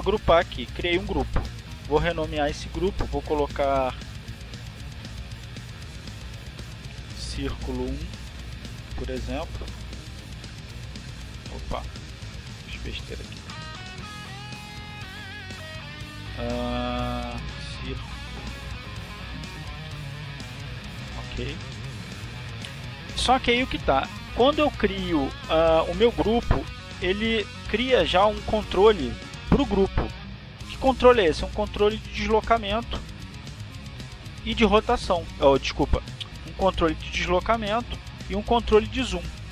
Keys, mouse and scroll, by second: 0.8 shift+click, 3.7 click, 5.3 click, 5.6 click, 7.6-13.5 typing, 15.3 Down, 16.7 click, 17.8-18.8 drag, 19.2 click, 20.2-23.3 typing, 35.4 click, 37.6 ctrl+z, 38.4 click.